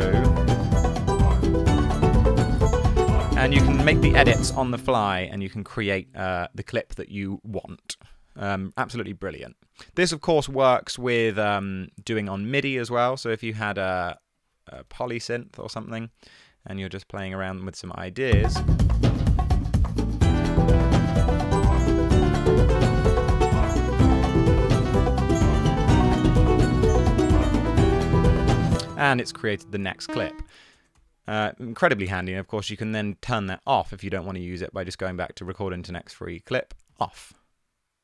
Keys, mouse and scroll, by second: 4.5 space, 8.2 e, 12.8 shift+super+t, 14.8 typing, 15.3 Down, 15.5 Down, 15.7 Return, 20.7-28.7 typing, 30.1-31.0 typing, 32.2 BackSpace.